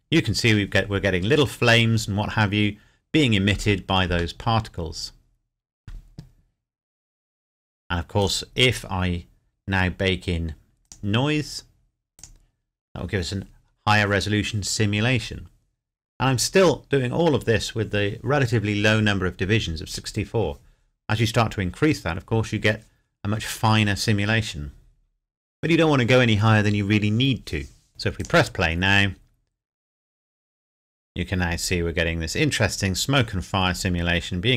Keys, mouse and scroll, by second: 4.0 shift+Num_Lock, 4.0 click, 4.4 shift+middle click, 8.5 click, 9.2-10.4 scroll down 1, 10.8 click, 27.9 click.